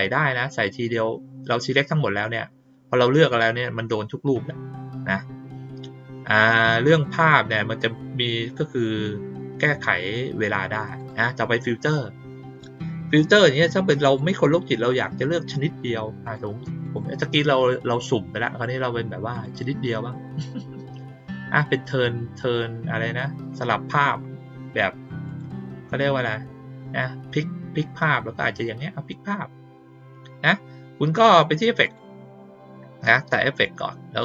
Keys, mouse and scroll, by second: 10.9 click, 14.0 click, 16.2 click, 16.8 click, 19.3 click, 23.7 middle click, 25.2 click, 31.8 click.